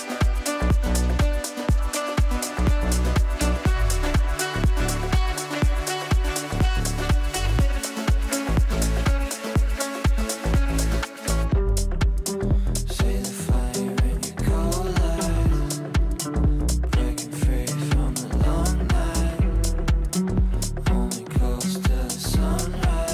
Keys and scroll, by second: 0.6 shift+Page_Down.